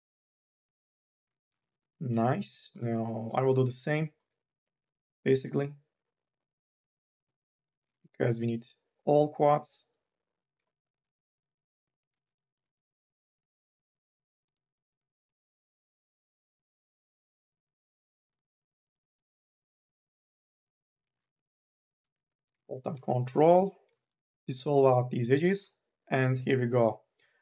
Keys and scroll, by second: 21.2 ctrl+z.